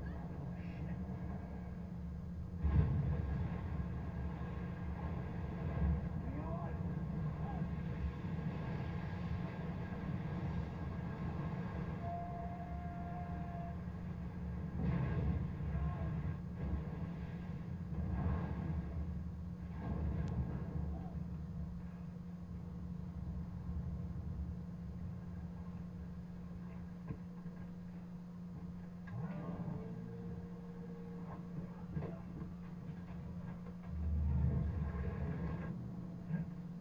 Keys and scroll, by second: 33.5 Down.